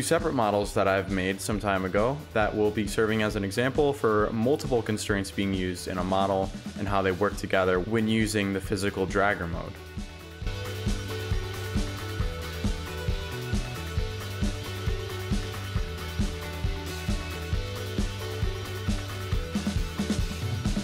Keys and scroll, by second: 0.7 shift+d, 3.2 Delete, 9.1 s, 9.4 w, 10.2 shift+s, 10.9 shift+w, 14.1 s, 16.5 ctrl+z, 16.8 s, 18.7 d.